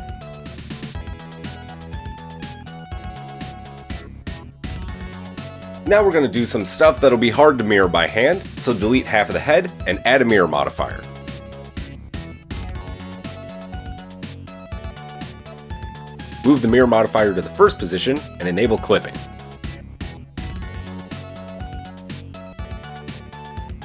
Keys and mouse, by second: 0.0-0.3 drag, 0.7 Tab, 0.7-8.5 middle drag, 7.0 KP_1, 7.1 Tab, 8.5-17.8 drag, 10.7 x, 12.4 KP_1, 17.8-18.8 middle drag, 18.8 click, 19.4-20.5 shift+middle drag, 20.5 click, 20.8-23.8 middle drag.